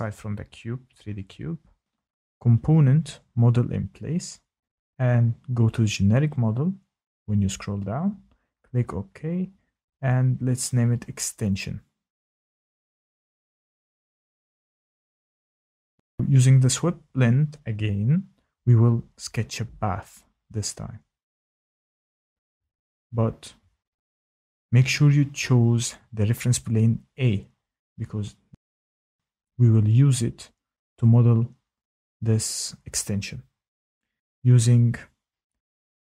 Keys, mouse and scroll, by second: 0.0 click, 3.4 click, 5.4 click, 7.6 click, 8.6 click, 10.1 click, 11.5-13.1 typing, 14.9 click, 17.4 click, 20.6 click, 25.2 click, 28.4 click, 30.1 click, 31.6 click, 33.7 click.